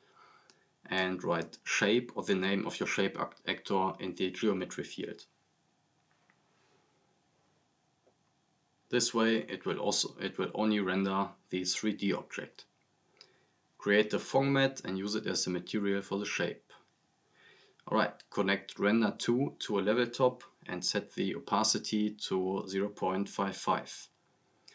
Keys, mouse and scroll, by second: 1.6 click, 2.5-3.5 typing, 5.8 click, 12.1-19.1 drag, 21.0 scroll up 1, 21.7 scroll down 1, 21.8 click, 22.2 scroll up 1, 22.3 right click, 22.8 typing, 23.3-23.8 click, 23.8 scroll down 1, 24.0-24.4 click.